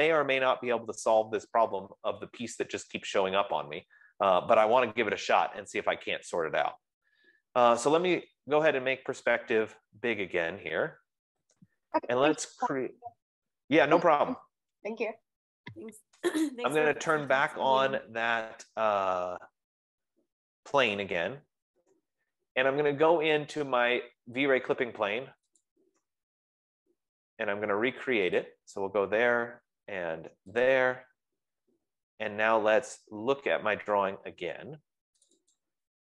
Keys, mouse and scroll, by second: 5.1 click, 8.3 click, 10.3 click, 11.3-12.0 scroll, 12.0-12.9 scroll, 13.0-13.9 scroll, 16.9 scroll, 18.8 F15, 18.8 scroll, 20.4 middle click, 21.5-28.0 drag, 27.6 middle click, 29.2 click, 31.0 click, 35.6 click.